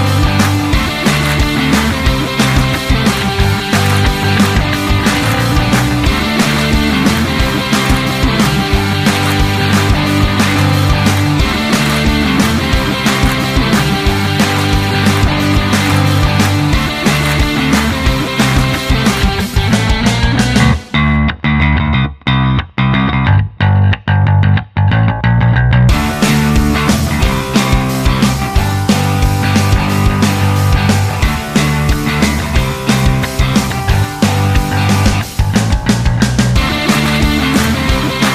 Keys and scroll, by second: 2.5-5.1 typing.